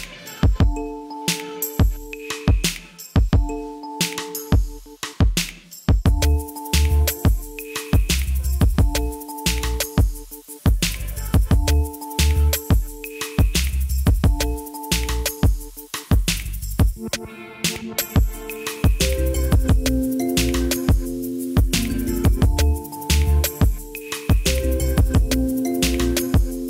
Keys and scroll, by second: 10.3 Delete, 14.6 c, 15.6 ctrl+z, 17.6 c, 18.6 ctrl+z, 20.2 c.